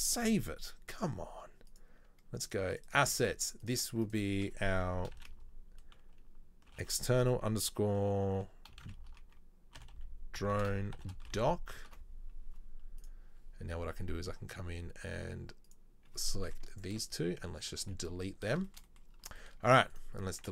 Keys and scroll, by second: 20.4 Delete.